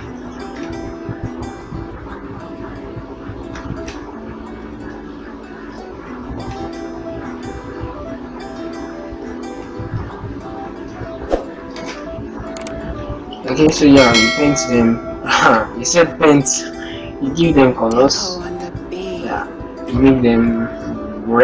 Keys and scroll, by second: 9.4 ctrl+Right, 11.4 shift+End, 13.8 ctrl+Return, 15.4 shift+End, 17.9 ctrl+Return, 20.3 shift+End.